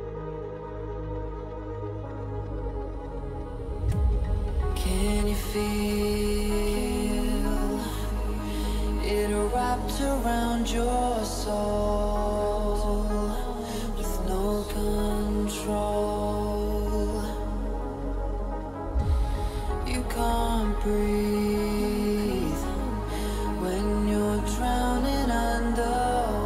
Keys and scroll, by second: 5.4 ], 11.5 h, 16.7 o, 18.8 Return, 19.6 [, 23.1 ].